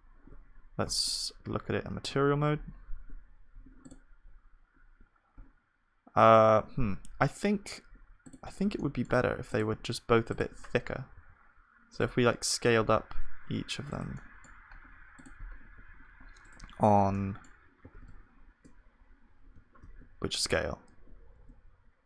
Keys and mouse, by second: 0.8 z, 2.0 middle click, 3.9-6.2 drag, 4.7-6.2 right drag, 6.2-8.8 middle drag, 8.8-12.9 drag, 8.8-11.1 right drag, 11.1 s, 12.9 s, 14.2-21.2 middle drag, 15.4-17.2 drag, 15.4-17.2 right drag, 15.8 s, 17.8 s.